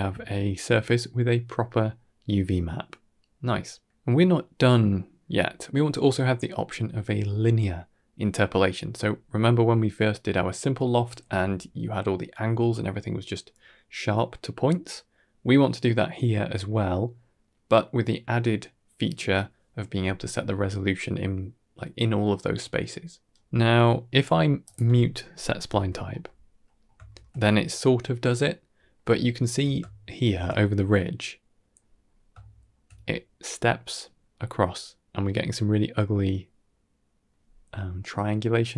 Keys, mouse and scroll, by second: 0.0 ctrl+shift+click, 0.2 scroll down 1, 0.3-0.8 middle drag, 1.7-3.8 middle drag, 3.8 Tab, 3.8 click, 6.3 shift+middle drag, 6.7-8.0 middle drag, 8.3-8.7 middle drag, 23.1-23.4 scroll up 3, 23.4 middle click, 24.5 click, 25.5 m, 26.1-26.5 middle drag, 26.7 scroll up 2, 27.0 shift+middle click, 28.4-28.8 middle drag, 29.0-29.4 ctrl+middle drag, 29.7-30.2 shift+middle drag, 30.5-31.6 middle drag, 31.9 scroll up 2, 32.3 shift+middle drag, 34.2-37.1 middle drag, 38.6-38.7 middle drag.